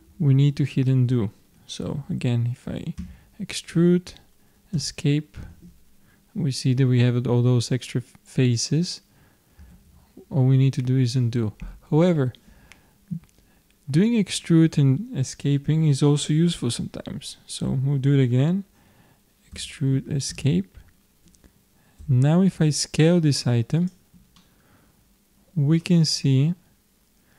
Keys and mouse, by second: 3.2 e, 9.7 ctrl+z, 19.6 e, 22.0 s, 24.4-26.3 middle drag.